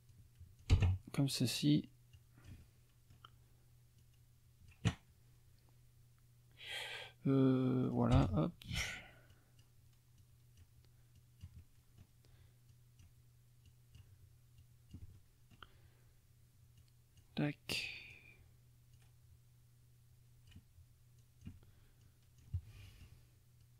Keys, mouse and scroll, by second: 0.1 click, 0.7 Return, 2.2-3.3 drag, 4.0 click, 7.8 click, 8.2 Return, 9.3 click, 10.2 click, 11.2-12.2 drag, 11.6 middle click, 11.6 right click, 12.7 click, 13.7 click, 14.6 click, 15.3 middle click, 16.8 click, 17.8 click, 18.9 click, 19.0 9, 21.2 click, 22.0-23.2 drag, 22.6 right click, 23.6 click.